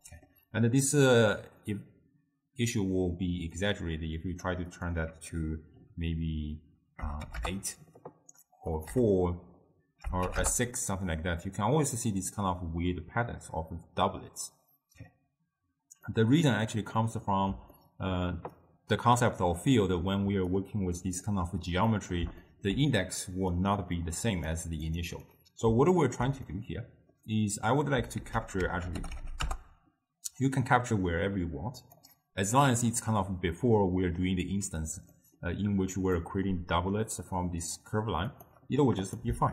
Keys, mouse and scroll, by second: 0.0-3.1 middle drag, 3.7-7.9 drag, 8.8-11.8 drag, 16.1-18.6 middle drag, 18.6 click, 19.8 middle click, 20.3 d, 20.6-21.3 drag, 21.3 d, 21.4 d, 22.0-23.6 middle drag, 23.6 click, 25.3-28.2 middle drag, 28.2 ctrl+a, 35.2 middle click, 36.1 click, 38.3 click, 39.1 click.